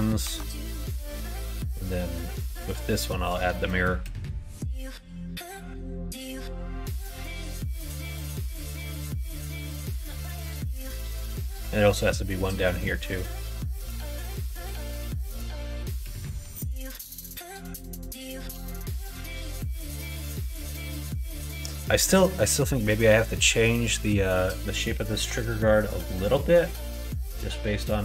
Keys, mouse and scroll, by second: 0.2 Tab, 2.0 click, 3.1-6.2 drag, 6.8 click, 7.0 middle click, 7.5 alt+z, 8.0 click, 8.2 middle click, 9.3 middle click, 10.0 middle click, 10.8 middle click, 12.4 middle click, 13.6-14.7 middle drag, 14.9 middle click, 15.8 click, 16.3 Tab, 16.6 middle click, 18.8 middle click, 19.5 alt+z, 19.9 click, 21.0 middle click, 22.7 middle click.